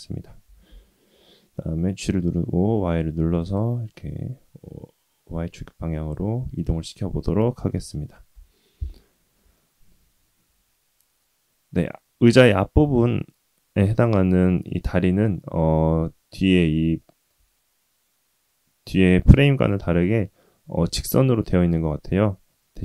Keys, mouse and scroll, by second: 0.4 g, 3.9-6.6 middle drag, 8.3 KP_3, 9.0-9.4 scroll up 2, 9.5-9.9 shift+middle drag, 11.2-11.8 scroll up 1, 11.8-12.8 scroll down 1, 15.2-15.8 scroll down 2, 16.9-17.3 shift+middle drag.